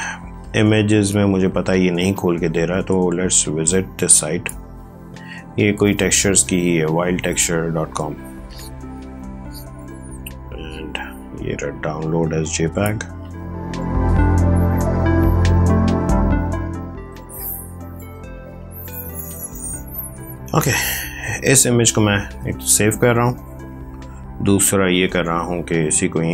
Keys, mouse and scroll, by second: 23.5 click, 25.9 click.